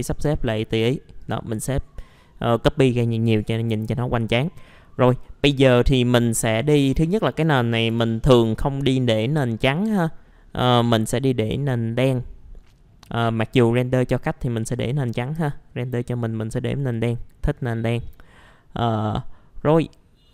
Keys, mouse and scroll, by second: 7.0 ctrl+click, 7.9 ctrl+m, 12.0 middle click, 13.0 click.